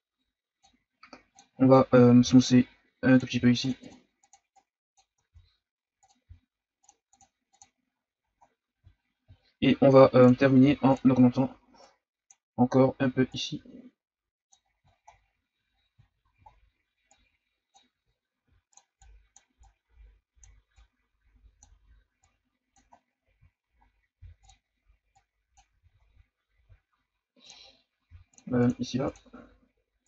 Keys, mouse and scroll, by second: 1.5-2.2 ctrl+scroll up 4, 2.2 shift+f, 3.3 f, 3.8-5.3 drag, 5.3 shift+f, 6.2 f, 7.1 click, 7.9-8.4 scroll down 4, 8.9-9.6 shift+scroll up 9, 10.2 click, 10.6 f, 11.8-14.6 drag, 14.6-15.2 scroll down 8, 15.2-15.6 scroll up 6, 15.7 scroll down 5, 16.0-17.1 shift+scroll up 10, 17.1-18.1 drag, 18.1-18.4 shift+scroll down 4, 18.4 f, 19.0-22.9 drag, 22.9 scroll down 2, 23.3-24.1 scroll up 4, 24.1 f, 25.1 click, 25.8 ctrl+z, 26.0-26.7 scroll down 2, 26.7-27.4 shift+scroll down 3, 27.4 click, 27.6-28.0 scroll up 3, 28.0 f, 28.6-30.0 drag.